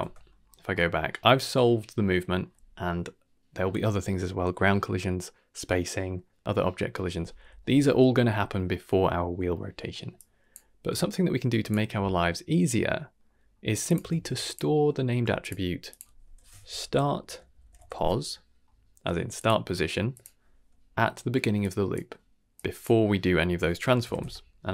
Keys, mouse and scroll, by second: 0.0 Tab, 0.4-0.9 scroll down 3, 0.7 middle click, 1.1 middle click, 8.3 middle click, 9.9 middle click, 10.1-10.5 drag, 10.7 g, 12.0 middle click, 13.1 middle click, 13.4-13.8 scroll up 2, 13.8 click, 14.1 shift+d, 14.8 scroll up 2, 15.1 g, 15.8-17.9 drag, 19.3-20.2 drag, 21.5-21.9 drag, 22.5-24.7 drag.